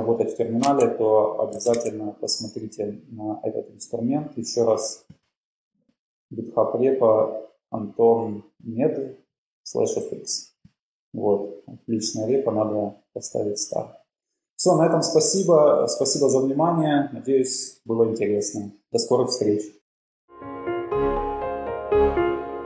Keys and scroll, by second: 0.6 super+Tab, 1.6 super+Tab, 1.8 super+Tab, 5.8 super+Page_Up.